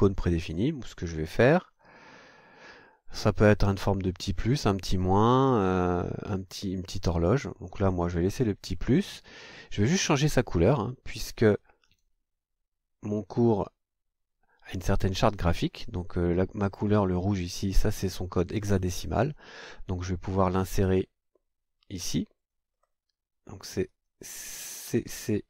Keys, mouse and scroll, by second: 0.5 click, 1.7-3.1 scroll down 3, 3.1 click, 8.6 click, 11.6 click, 20.8 click, 22.0 click, 22.7 scroll down 2, 23.9 click, 24.9 c.